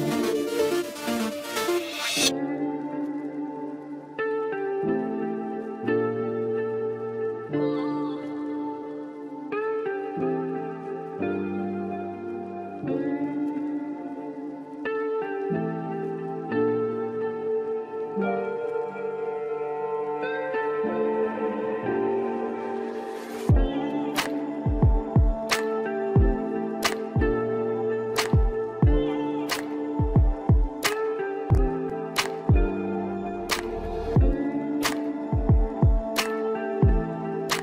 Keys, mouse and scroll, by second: 0.0-0.7 drag, 2.5-5.5 drag, 7.2-11.4 drag, 11.7-16.5 drag, 16.5-17.0 scroll up 2, 17.0-19.3 middle drag, 19.3 click, 20.1-21.0 scroll down 1, 21.3 scroll down 5, 21.4-22.1 middle drag, 22.1-23.5 scroll down 1, 23.5-24.5 drag, 24.5-25.3 scroll down 2, 25.3-26.2 shift+middle drag, 26.2-26.5 scroll down 1, 26.5-27.9 scroll up 2, 27.9 scroll up 1, 28.0-28.5 scroll down 3, 28.5-29.1 shift+middle drag, 29.1 click, 29.6-30.1 scroll down 2, 30.1-32.5 middle drag, 32.5 click, 33.5 KP_1, 34.7 click, 35.2 scroll up 1, 35.7-37.3 shift+middle drag, 37.3-37.6 scroll up 2.